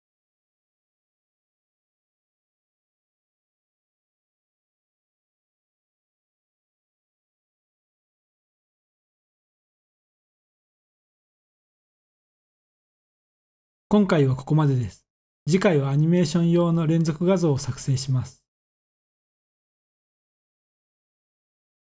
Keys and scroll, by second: 1.8 0, 8.8 F12.